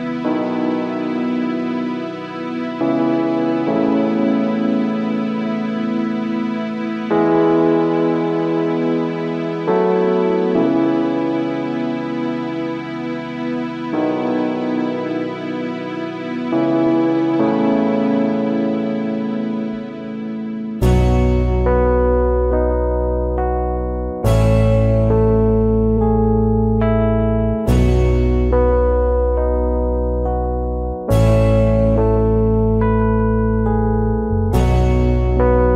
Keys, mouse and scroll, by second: 1.0 shift+click, 2.2-3.2 alt+scroll up 1, 5.5 alt+scroll down 1, 5.6 space, 8.7 space, 9.2 alt+scroll up 1, 12.5 alt+scroll up 1, 16.1 space, 19.2 alt+scroll down 1, 19.3 space, 20.7 alt+click, 23.4 space, 27.3 space, 29.4 space, 30.5 alt+scroll down 1, 32.2 alt+scroll up 1, 35.5 space.